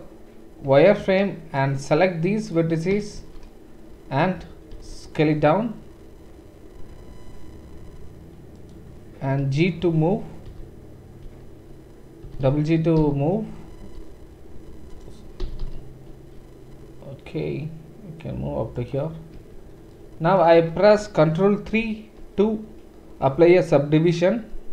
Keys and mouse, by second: 0.7 1, 1.7-8.7 drag, 3.2 shift+z, 4.7 s, 8.7-24.7 middle drag, 9.4 g, 15.4 g, 19.4 Tab.